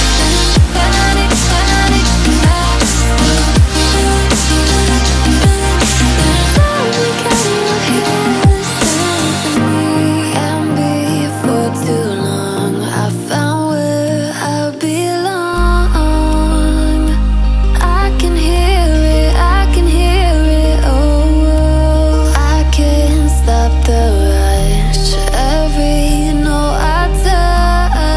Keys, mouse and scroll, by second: 0.9 alt+scroll up 1, 1.4 click, 2.1 alt+scroll down 1, 3.1 click, 5.5-5.9 alt+scroll down 1, 6.3-7.9 drag, 10.0 click, 10.2-10.9 alt+scroll up 2, 10.9 click, 12.4 alt+scroll up 1, 12.8 click, 13.5 alt+scroll down 1, 14.1 ctrl+g, 15.6-16.0 alt+scroll down 2, 16.0-16.9 alt+scroll up 2, 16.9-18.3 drag, 18.3-19.0 alt+scroll up 2, 19.0-22.0 drag, 22.0 ctrl+shift+], 23.4-24.8 drag, 24.8-25.4 alt+scroll down 2, 25.4-26.1 alt+scroll up 2, 26.1 click, 27.4 alt+scroll down 1.